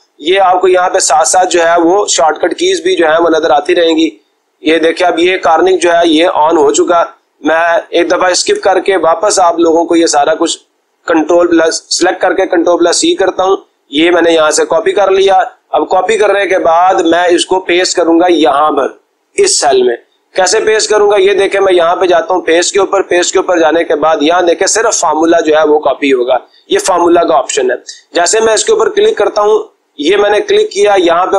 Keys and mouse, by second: 3.7-5.2 drag, 7.8-8.8 drag, 10.9-11.9 drag, 19.2-20.4 drag, 21.9 click, 30.2 click.